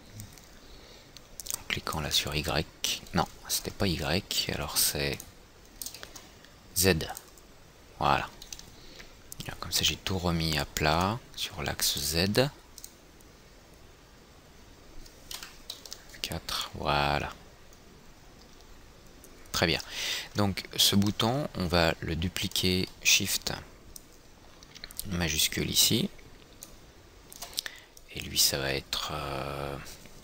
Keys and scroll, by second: 3.8 ctrl+z, 15.7 F4.